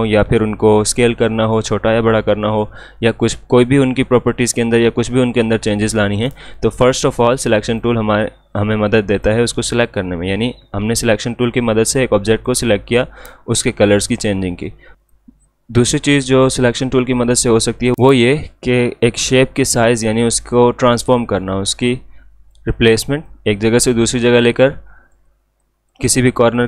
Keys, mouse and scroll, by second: 7.7 click, 15.0 click, 19.2 click, 21.5-26.6 drag.